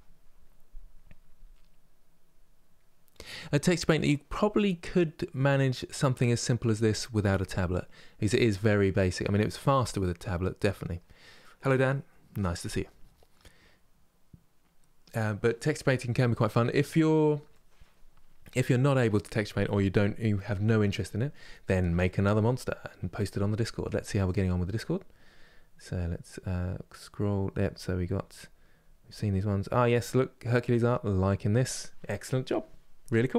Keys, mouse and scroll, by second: 5.0-8.2 scroll up 2, 8.2-16.5 scroll up 1, 16.5 scroll down 2, 17.2-20.9 middle drag, 20.9 scroll down 1, 21.7-33.3 shift+middle drag.